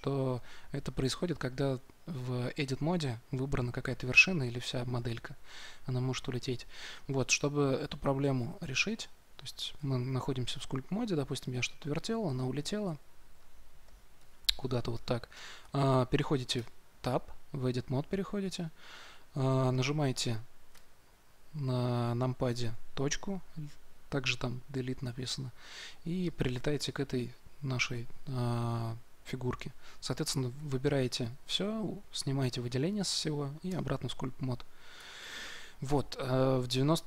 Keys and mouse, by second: 4.5 a, 4.9 a, 9.7 Tab, 16.4 Tab, 20.6 KP_Decimal, 29.9 a, 30.4 a, 30.8 a, 33.6 Tab, 34.9 Tab.